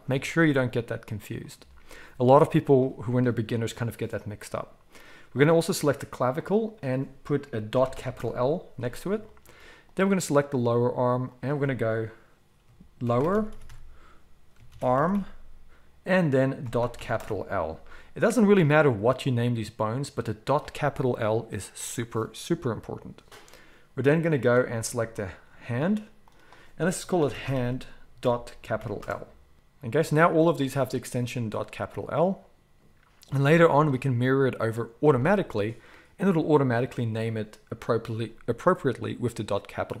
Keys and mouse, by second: 5.4-6.4 middle drag, 6.4-9.9 drag, 9.9-11.3 middle drag, 11.3-24.4 drag, 24.4-26.3 middle drag, 26.3-30.7 drag, 30.7 middle click, 31.4 click, 31.5-40.0 middle drag.